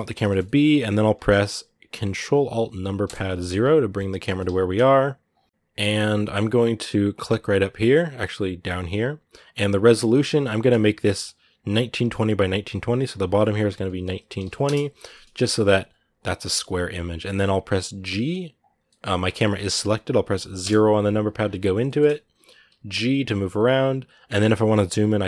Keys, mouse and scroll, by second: 2.9 ctrl+alt+KP_0, 12.0-15.4 drag, 15.4 g, 18.7 middle click, 19.0 scroll down 3, 21.6 scroll up 4, 21.6 shift+middle click, 22.5 g.